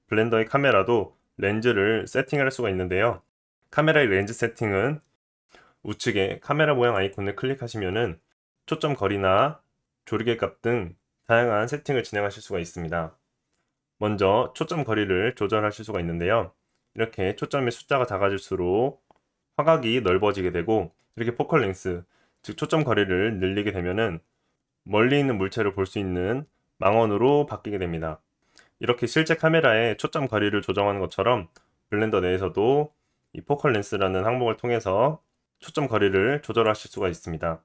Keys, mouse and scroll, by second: 7.1-12.6 middle drag, 12.6-37.6 drag.